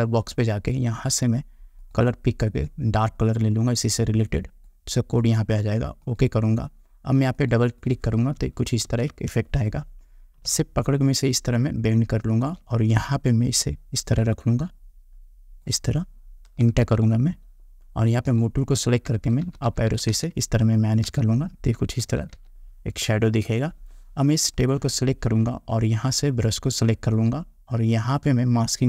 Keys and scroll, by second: 9.0 ctrl+t, 17.0 Return.